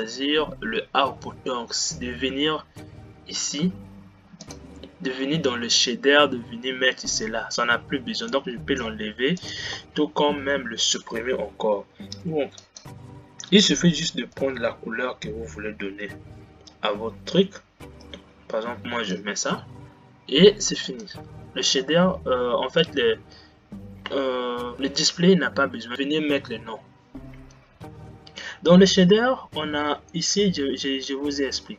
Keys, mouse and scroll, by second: 21.8-23.0 drag, 23.0-24.8 middle drag.